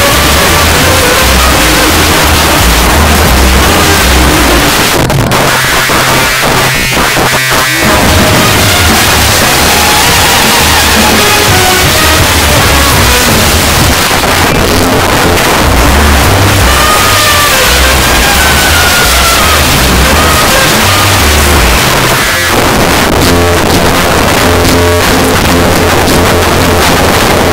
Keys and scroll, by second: 4.7 Page_Down, 13.9 Page_Down, 21.8 Page_Down.